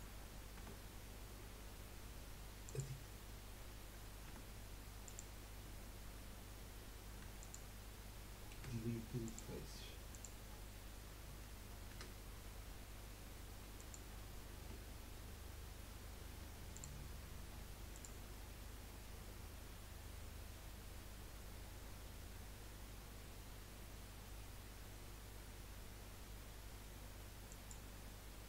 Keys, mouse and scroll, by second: 0.0 click, 0.6 Tab, 2.6-4.3 drag, 4.3 Tab, 5.0 click, 7.2 3, 7.4 click, 8.5 Delete, 10.1 click, 11.9 F3, 14.6 Tab, 16.7 click, 17.9-21.0 drag, 28.3 scroll down 3.